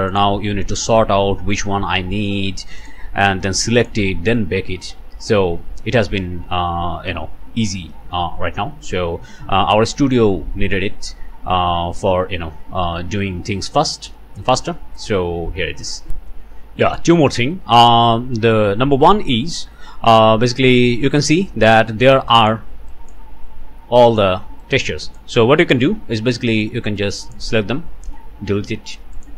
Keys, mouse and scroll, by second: 0.1 click, 0.8 click, 2.8 click, 3.3 click, 4.6 scroll up 1, 5.3 scroll up 1, 8.8 scroll down 1, 9.9 scroll up 1, 10.4-11.4 middle drag, 11.4-11.9 scroll down 2, 16.1 click, 16.9 click, 17.5 click, 17.9 middle click, 18.3-18.7 scroll up 2, 18.7 click, 20.5 click, 21.5 click, 22.3 click, 22.9 click, 24.1 click, 24.6 click, 25.8 alt+a, 26.6 click, 28.0 Delete, 29.1 click.